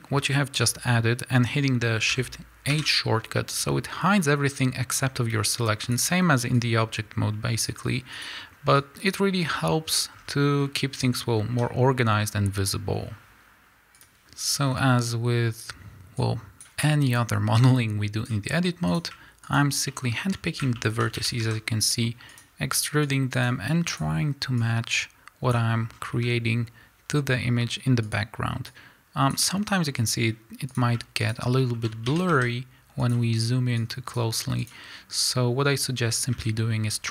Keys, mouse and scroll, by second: 0.6 z, 2.7 shift+h, 3.5-4.5 scroll down 2, 4.5 scroll down 1, 4.5-5.9 drag, 5.0-5.4 scroll up 1, 6.5-8.2 drag, 8.7-14.6 drag, 9.6 scroll down 1, 10.6 scroll up 1, 11.5 a, 12.1-13.5 scroll up 1, 13.7 KP_Enter, 14.6 scroll up 1, 15.0 scroll down 1, 15.6 click, 16.2 click, 17.7-18.9 drag, 19.5 shift+click, 19.9-22.4 shift+middle drag, 21.2 e, 22.4 click, 23.1 click, 24.6-28.1 drag, 26.0 scroll down 1, 26.1 a, 27.6 scroll up 1, 28.7-30.7 drag, 31.3 shift+click, 31.6-33.2 shift+middle drag, 32.1 e, 33.2 click, 33.8 click, 35.2-36.9 drag, 36.1 scroll down 1, 36.3 a, 36.9 scroll up 1.